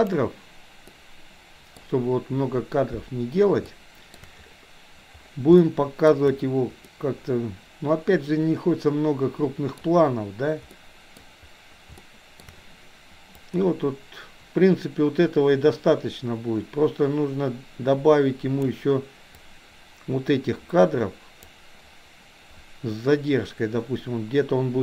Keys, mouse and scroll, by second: 0.8-1.7 middle drag, 3.7-4.1 shift+middle drag, 5.6-6.1 shift+middle drag, 7.0-9.7 middle drag, 10.7-11.2 middle drag, 12.0-12.3 shift+middle drag, 13.5-18.7 drag, 19.3-21.5 drag.